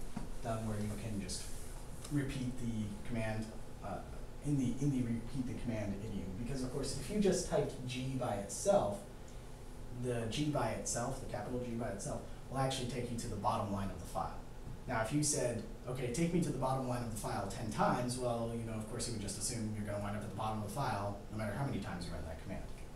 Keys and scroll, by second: 7.5 g.